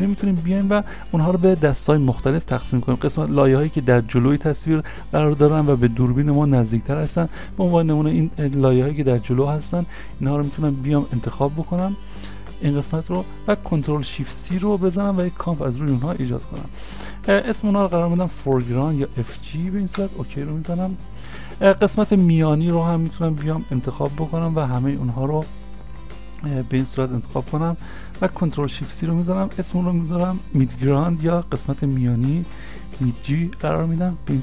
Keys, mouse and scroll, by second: 7.4 `, 7.9 ctrl+click, 9.8 ctrl+click, 11.3 ctrl+click, 14.3 ctrl+shift+c, 18.3 shift+f, 18.6 shift+g, 20.0 Return, 23.3 Return, 23.3 scroll down 1, 25.6 shift+click, 28.7 ctrl+shift+c, 30.8-31.2 typing, 32.9 shift+g.